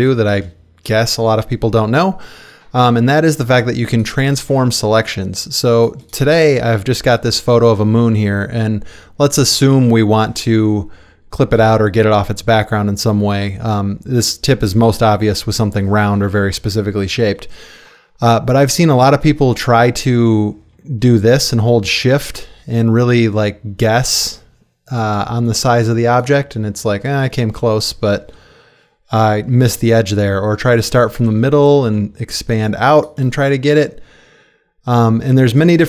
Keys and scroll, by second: 3.2 space, 5.0 space.